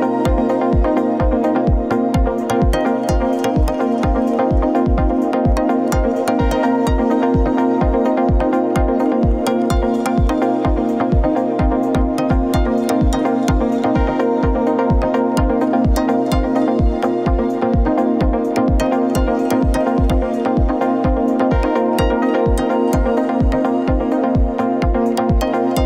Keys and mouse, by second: 2.2 click, 4.7-5.2 middle drag, 11.0 click, 15.3-16.7 middle drag, 19.5-24.1 drag, 24.9-25.8 shift+drag.